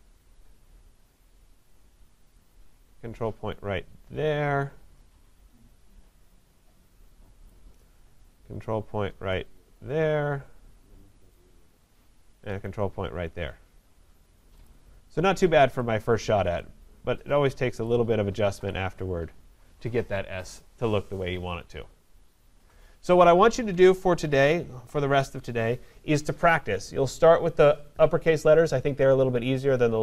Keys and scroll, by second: 24.7 ctrl+0.